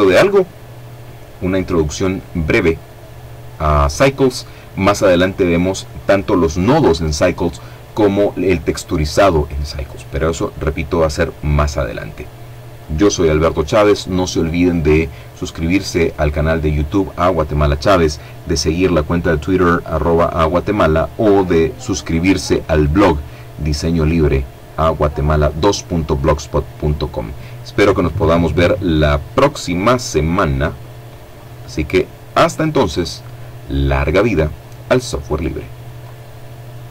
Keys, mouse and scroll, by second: 34.0 click, 35.0-36.9 drag.